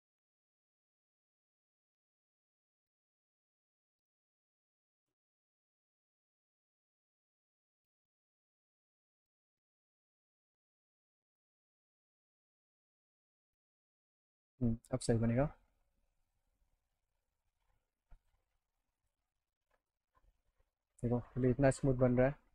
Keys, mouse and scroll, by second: 1.9 click, 4.1 click, 6.2 click, 6.6 click, 7.8 click, 8.3 middle click, 8.6 alt+middle click, 9.5-11.0 drag, 12.7-14.0 drag, 14.3 alt+middle click, 16.3 alt+middle click, 18.2 click, 19.0 click, 19.8 click, 20.7-22.0 alt+middle drag.